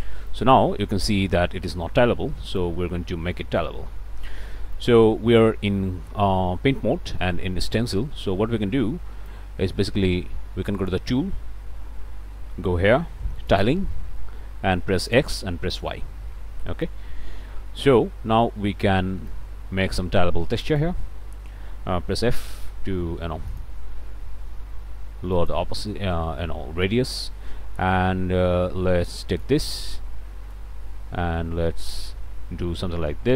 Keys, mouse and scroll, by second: 0.3-2.8 right drag, 3.2 middle click, 4.9-9.5 right drag, 10.8 click, 12.1-12.6 scroll down 1, 12.7 scroll down 1, 13.5 click, 14.0-14.3 scroll down 1, 15.1 click, 15.7 click, 16.9-19.1 right drag, 19.3-21.0 right drag, 22.3 f, 23.5 click, 24.5 f, 25.4 click, 26.1-29.7 right drag, 30.5-33.3 drag.